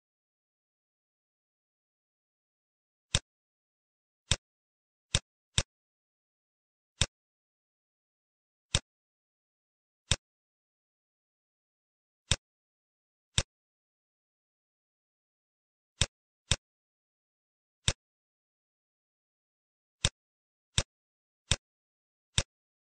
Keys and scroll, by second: 0.2 ctrl+d, 10.5 space, 13.8 space, 17.3 ctrl+d.